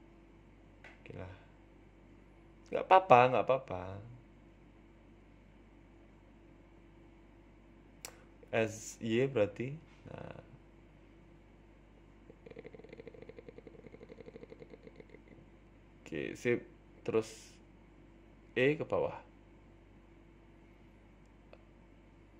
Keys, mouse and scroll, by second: 0.4 ctrl+t, 1.0 ctrl+r, 1.6 ctrl+r, 2.7 a, 2.8 a, 3.3 alt+shift+Right, 4.6 a, 4.7 a, 4.9 alt+shift+Right, 5.4 g, 6.6 s, 7.5 s, 10.5 g, 12.1 s, 13.6 g, 14.3 r, 15.3 g, 16.8-17.8 scroll down 5, 17.0 shift+middle click, 17.8 click, 18.2 scroll down 1, 18.4 shift+middle click, 19.5 click, 19.9 g, 21.1 click, 21.6 g.